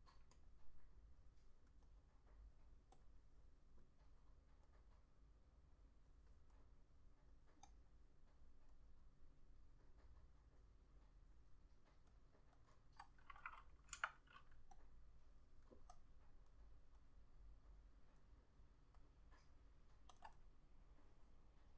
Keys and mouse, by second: 7.9 double click, 14.1 F6, 20.4 double click.